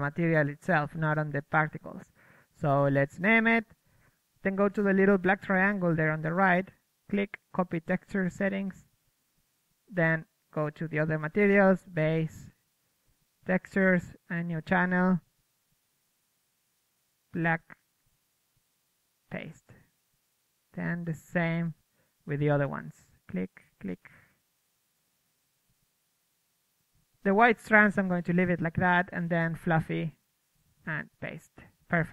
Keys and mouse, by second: 0.0 Escape, 2.5-3.9 drag, 3.9-5.7 right drag, 7.2-10.3 right drag, 10.3-11.5 middle drag, 11.5-16.3 right drag, 12.3-15.8 drag, 16.3-23.5 drag, 23.8-26.5 drag, 26.6-29.9 drag, 30.3-32.1 drag.